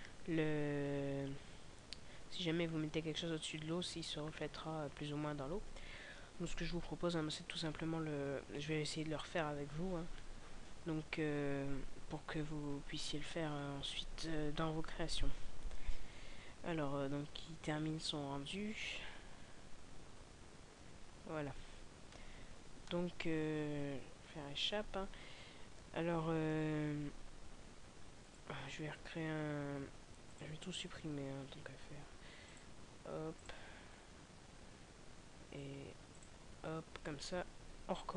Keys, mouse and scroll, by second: 24.1 Escape, 36.2 click.